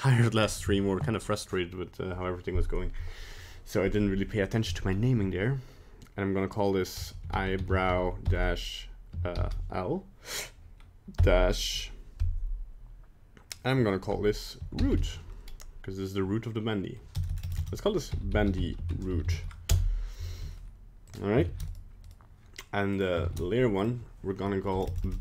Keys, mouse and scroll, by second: 14.9 o, 17.3 BackSpace, 17.4 BackSpace, 19.2 o, 21.0 click, 22.0 right click, 22.9 click, 24.8 BackSpace, 25.0 BackSpace.